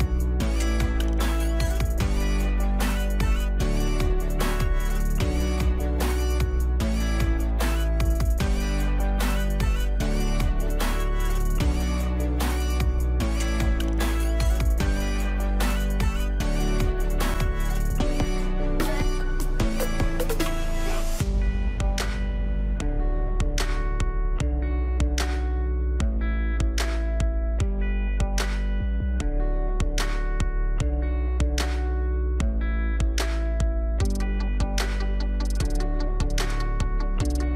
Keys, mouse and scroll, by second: 1.5-8.4 drag, 11.8-24.4 drag, 29.0 shift+click, 30.9 click, 32.5 alt+click, 34.0 ctrl+click.